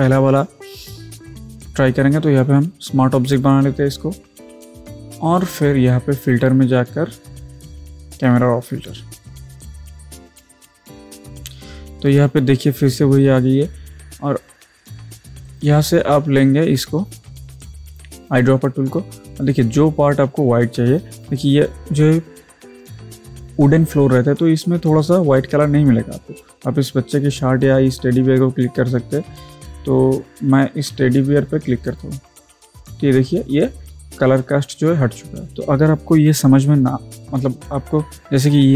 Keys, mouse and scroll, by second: 3.3 click, 6.2 click, 15.5 click, 31.9 click, 31.9 click, 35.5 ctrl+z.